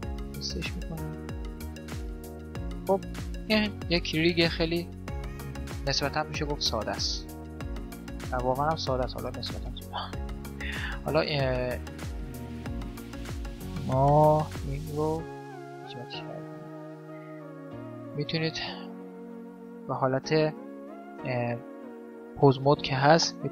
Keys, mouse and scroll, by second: 3.0-4.8 middle drag, 4.8 right click, 6.3 right click, 6.6 middle click, 7.8 right click, 8.3 right click, 8.6-11.7 middle drag, 10.7 g, 12.1-14.2 middle drag, 14.0 g, 14.5-16.4 middle drag, 15.1 g, 17.7-19.4 middle drag, 18.3-19.4 drag, 18.6 g, 19.4 right click, 19.5 click, 19.8 Tab, 20.1-21.5 middle drag, 21.5 Tab, 22.7-23.5 middle drag.